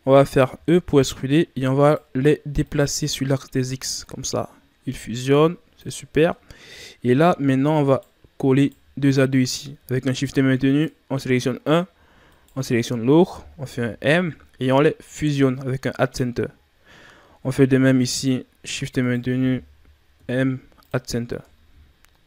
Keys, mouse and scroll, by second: 0.5 e, 2.6-5.6 drag, 6.3 middle click, 7.1-7.8 scroll up 1, 7.8 right click, 8.5 shift+right click, 9.9-10.6 ctrl+scroll up 2, 10.6 right click, 12.2 shift+right click, 13.7 m, 17.3-18.1 shift+scroll down 1, 18.1 right click, 18.9 shift+right click, 20.1 m, 21.4 Tab, 21.8-22.2 scroll down 3.